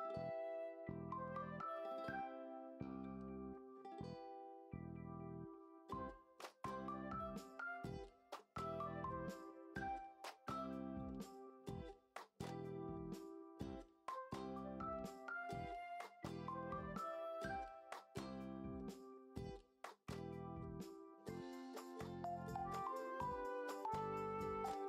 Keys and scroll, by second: 0.0-0.5 typing, 1.6 ctrl+z, 1.7-3.7 typing, 2.3 ctrl+z, 4.7-6.4 typing, 5.3 ctrl+z, 8.2 5, 10.8 b, 12.8-13.4 ], 13.9 ctrl+z, 14.4 ], 15.5 ctrl+z, 18.4 ctrl+d, 19.9 ctrl+alt+z, 20.2 ctrl+d, 20.4 p, 22.4 Return, 22.6 5, 22.8 BackSpace, 22.8 BackSpace, 22.9 1, 23.0 Return, 23.3 ctrl+j, 23.6 ctrl+l, 24.4 Return.